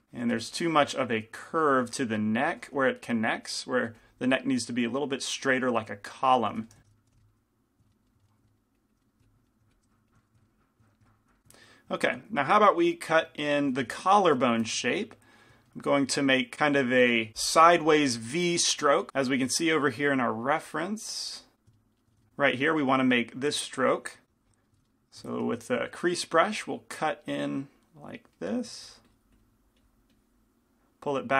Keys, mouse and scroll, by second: 0.0-0.4 typing, 0.0-1.9 drag, 1.9 right click, 1.9 f, 2.2 click, 2.7 f, 3.8 right click, 4.1-6.5 drag, 4.1 f, 6.5 f, 7.1 f, 7.6 click, 8.8-10.8 drag, 11.2-12.7 drag, 15.0 shift+c, 15.0 f, 25.6 shift+f, 27.3-31.3 drag, 27.3 right click, 28.5-30.5 right drag.